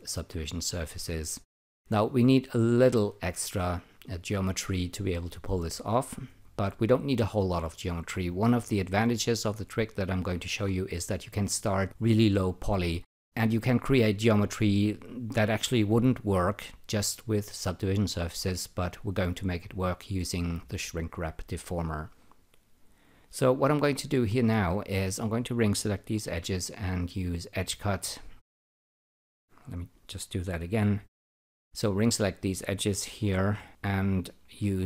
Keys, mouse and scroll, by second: 24.2-25.0 typing, 25.2 click, 26.2 n, 27.3 click, 31.0-31.8 typing, 31.8 click, 34.3-34.8 typing.